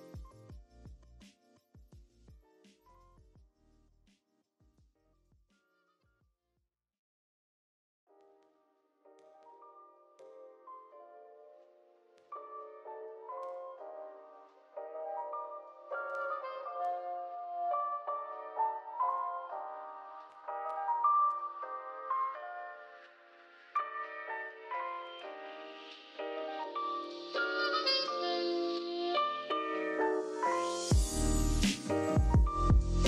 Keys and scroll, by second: 7.2-8.2 typing, 9.6 BackSpace, 12.3 a, 15.9 v, 18.2-19.1 typing, 22.2 a, 23.9 super+z, 28.1 v, 28.9 z.